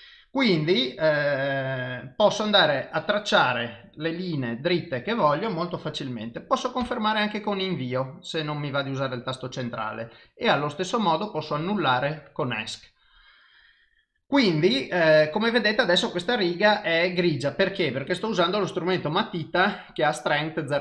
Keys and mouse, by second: 2.8 click, 10.3 click.